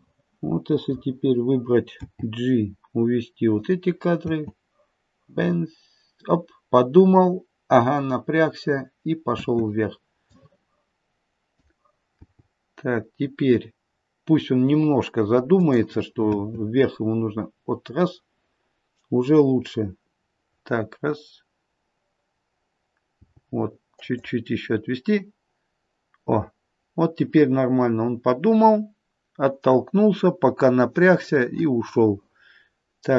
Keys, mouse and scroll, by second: 2.0 g, 4.3 space, 9.3 space, 10.2 click, 12.1 g, 16.3 space, 24.8 g.